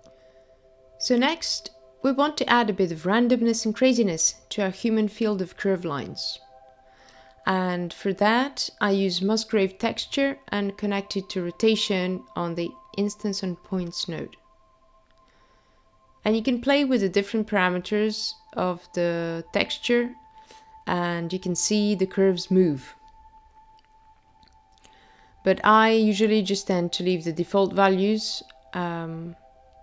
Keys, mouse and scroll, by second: 1.0 click, 2.9 click, 3.3 click, 4.4 middle click, 5.7 click, 7.3 shift+a, 13.6 click, 15.2 click, 17.2-18.2 scroll up 5, 20.4 click, 28.9 click.